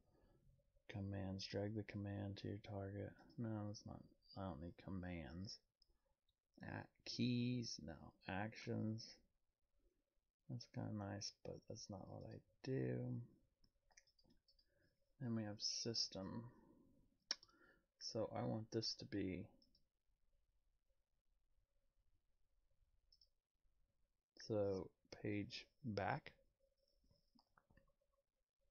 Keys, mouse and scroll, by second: 3.2 click, 7.1 click, 12.2 right click, 12.2 click, 14.1 right click, 14.5 click, 19.6 click, 23.1 click.